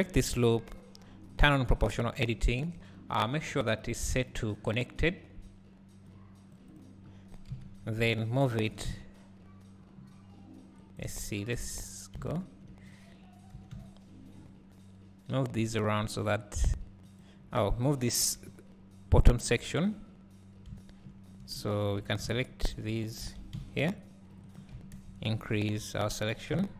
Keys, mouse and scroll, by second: 0.0 alt+click, 2.2 o, 6.8-11.2 drag, 7.6 KP_3, 8.8 g, 12.3 `, 13.6 g, 17.4 scroll down 1, 18.2 KP_3, 19.0 scroll up 1, 20.8 `, 23.3 alt+a, 24.0 c, 25.0 ctrl+KP_Add.